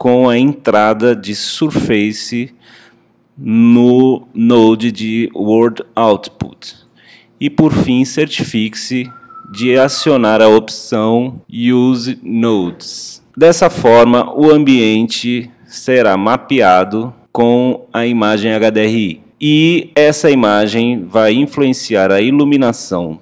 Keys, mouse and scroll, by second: 0.0 click, 4.7 click, 5.2 click, 14.0 click, 16.0 scroll down 2, 16.3-16.6 scroll up 4, 16.8-17.5 scroll down 3, 17.5 scroll up 1, 17.6 scroll down 2, 18.0-18.5 scroll up 3, 20.2-23.2 middle drag.